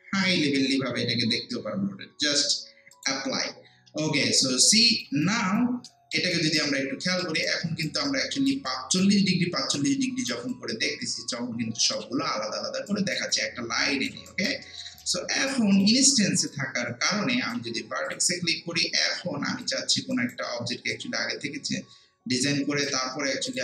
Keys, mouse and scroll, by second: 2.9 click, 3.9 scroll down 1, 4.6 alt+click, 5.2 alt+right click, 7.0 alt+middle click, 7.4 alt+right click, 8.1 alt+click, 8.7-10.5 alt+right drag, 10.5-12.9 alt+drag, 12.9 alt+right click, 13.3 alt+click, 14.6 alt+middle click, 15.0 alt+right click, 15.6 alt+click, 16.5-18.1 right drag, 18.1 click, 18.9 w, 19.6 alt+click, 20.1 alt+right click, 20.9-23.6 drag.